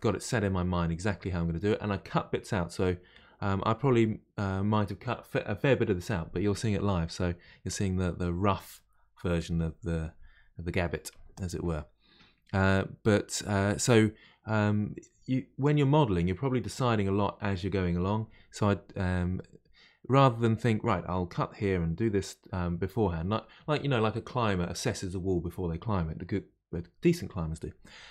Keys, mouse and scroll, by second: 19.3-22.4 middle drag.